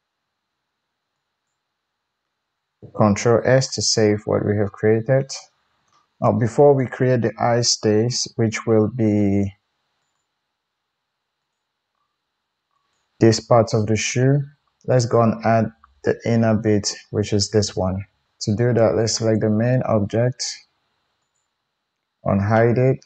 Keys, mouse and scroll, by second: 1.4-5.5 middle drag, 2.7 ctrl+alt+z, 3.2 ctrl+s, 5.8 shift+middle click, 6.0 KP_1, 6.7 click, 7.8 Tab, 9.9 click, 11.3 click, 12.7 click, 13.2-19.1 middle drag, 19.1 click, 19.3-21.1 middle drag, 21.2 click.